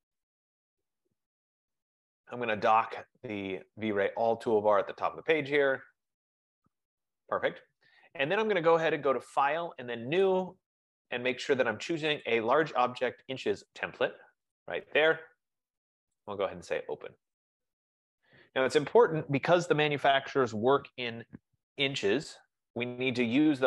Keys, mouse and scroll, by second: 0.3 click, 1.0 click, 1.7 click, 3.6 click, 6.1 click, 10.4 click, 12.5 click, 14.7 click, 16.5 click, 20.0 F15.